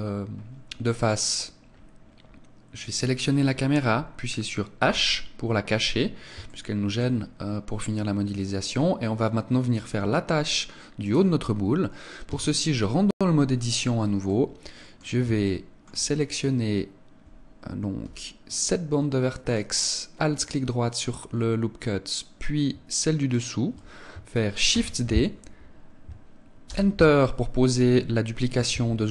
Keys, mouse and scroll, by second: 3.0 right click, 4.9 h, 6.0-6.4 scroll up 1, 6.5 shift+middle click, 6.5 scroll up 1, 7.2 scroll up 2, 11.2 right click, 12.3 Tab, 14.2 middle click, 15.4 shift+middle click, 19.4 alt+right click, 23.2 alt+shift+right click, 24.6 shift+d.